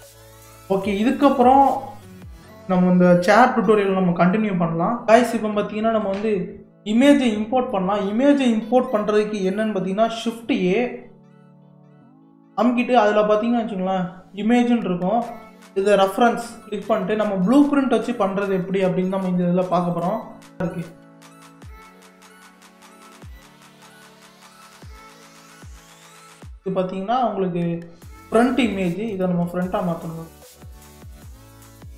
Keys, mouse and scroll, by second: 0.9-3.9 middle drag, 7.7-10.8 middle drag, 11.4 shift+a, 23.4-23.9 middle drag, 23.9 scroll up 1, 24.4-29.2 middle drag, 29.2 click, 29.8 click.